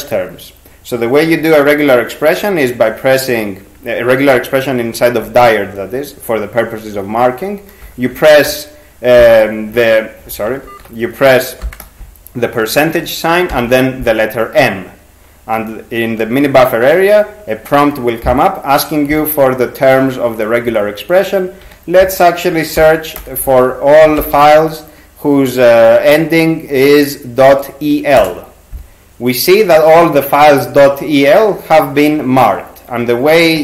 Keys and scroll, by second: 9.0-9.9 typing, 10.7 ctrl+g, 11.6 shift+5, 13.5 m, 21.6 \, 22.8-24.7 typing, 28.2 Return.